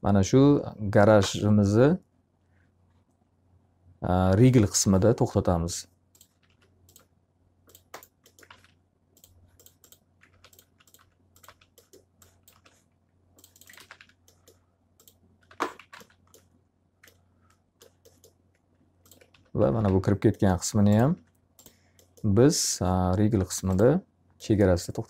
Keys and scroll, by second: 5.9 s, 8.4 alt+a, 10.2 alt+r, 13.7 alt+a, 13.9 q, 15.4 x, 15.9 alt+a, 15.9 z, 19.0-20.3 typing, 21.1 F3.